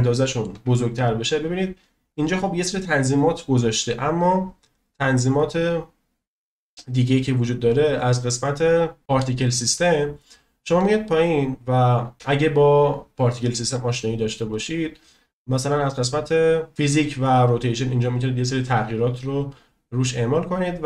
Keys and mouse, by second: 6.7 click, 7.7 click, 14.5 click.